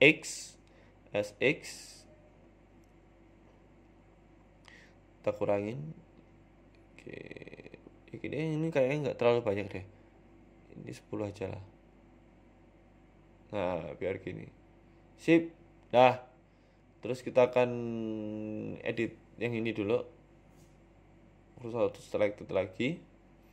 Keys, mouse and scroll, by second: 0.7 s, 2.4 s, 4.3 middle click, 6.4 click, 6.6 click, 7.1 click, 7.5 middle click, 8.0 scroll down 1, 8.2 middle click, 8.6 KP_1, 9.7 right click, 10.7 click, 13.2 click, 16.0 middle click, 17.6 right click, 18.2 Tab, 19.1 click, 20.2 KP_3, 20.4 KP_1, 21.0 scroll up 1, 21.2 scroll down 2, 21.5-21.8 scroll up 1, 21.8 shift+s.